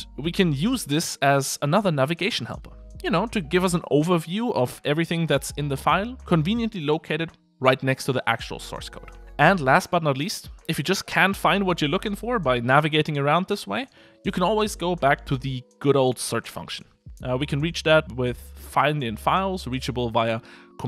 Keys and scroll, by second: 0.2 super+7.